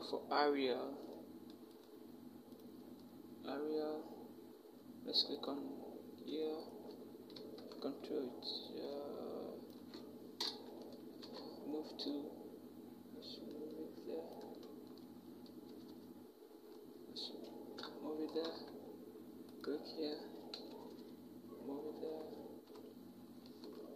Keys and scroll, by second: 7.2 ctrl+t, 10.2 alt+shift+Return, 11.0 v, 15.5 Down, 15.7 Down, 17.6 Up, 20.4 ctrl+shift+Right, 20.5 ctrl+shift+Right, 20.7 ctrl+shift+Right, 21.9 shift+Up, 22.5 shift+Up.